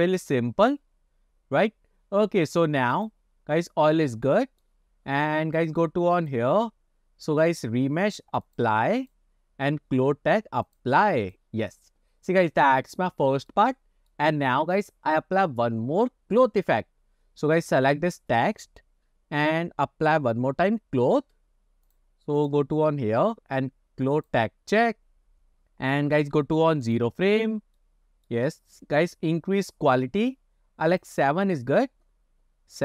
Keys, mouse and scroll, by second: 3.2 click, 3.5 scroll down 1, 3.7-4.7 middle drag, 6.2 click, 7.6 drag, 8.5-9.5 drag, 10.7-11.4 drag, 12.6-13.1 middle drag, 13.4 shift+middle drag, 13.8 middle click, 17.9 click, 21.9 click, 22.5 click, 24.2 click, 26.9 click, 27.9-28.4 middle drag, 31.2 click.